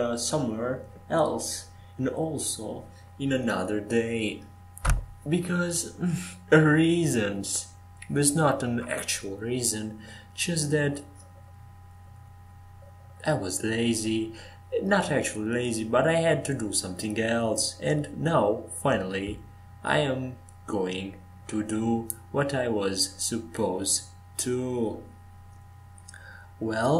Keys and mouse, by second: 0.4 s, 2.3-3.6 drag, 6.2 g, 8.1 g, 10.2 s, 12.2 Tab, 12.4 f, 13.8 Tab, 15.3 e, 16.7 Escape, 17.8 e, 18.4 Escape, 20.3 ctrl+z, 20.8 ctrl+z, 21.4 ctrl+z.